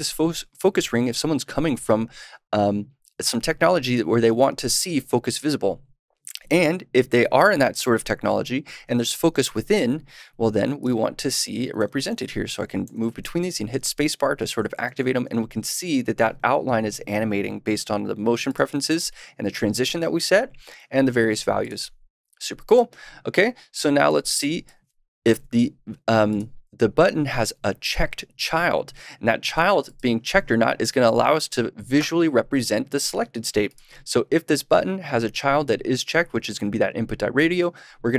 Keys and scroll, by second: 16.4 space, 25.2 super+/, 29.5 super+s.